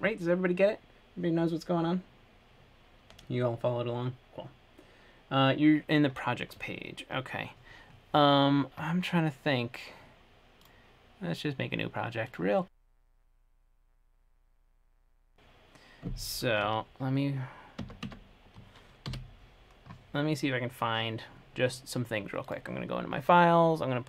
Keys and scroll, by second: 16.9 super+Tab, 19.3 super+F5.